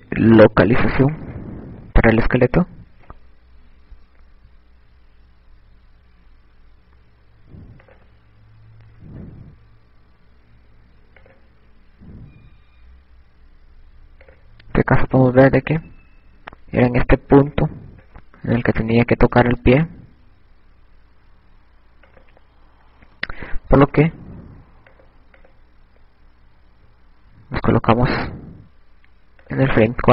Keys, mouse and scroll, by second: 3.6 ctrl+Tab, 10.9 click, 24.2 click, 26.2 click, 29.9 click.